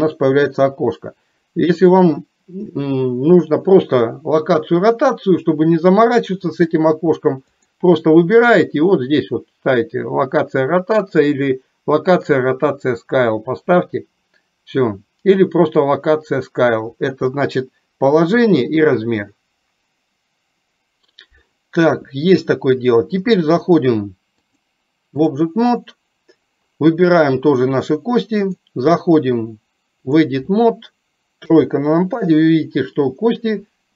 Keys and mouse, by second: 1.9-23.7 drag, 24.4-25.4 drag, 28.6-30.4 drag.